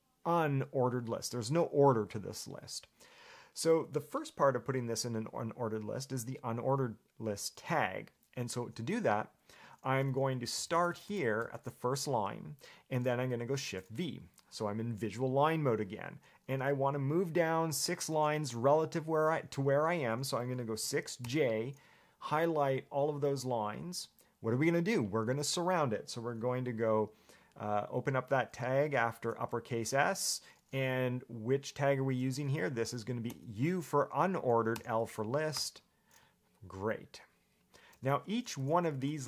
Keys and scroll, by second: 9.8 Escape, 10.5-11.6 typing, 13.8 shift+v, 20.9 6, 21.4 j, 30.2 shift+s, 33.5 u, 34.9 l, 35.8 Return, 38.3 Escape, 38.5-39.2 typing.